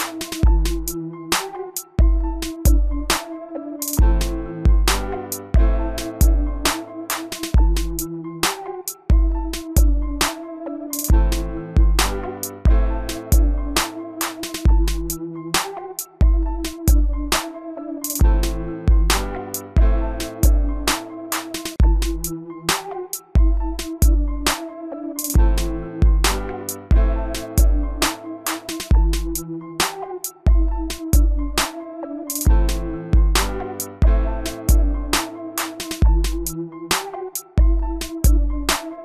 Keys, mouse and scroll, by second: 1.1-4.2 scroll down 1, 4.2 scroll up 1, 5.5-7.6 middle drag, 14.0-18.6 drag, 26.0 middle click, 26.6-28.5 middle drag, 28.5 scroll down 1, 29.5-32.0 middle drag, 32.0 scroll up 1, 33.7-37.6 scroll down 1, 38.4-39.0 drag.